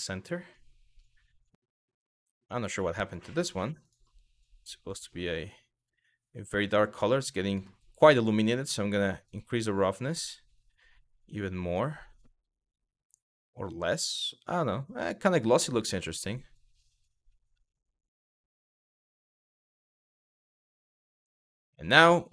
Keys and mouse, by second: 1.1 click, 2.7 click, 5.0 click, 8.9-15.2 drag, 18.2 click, 21.2 click.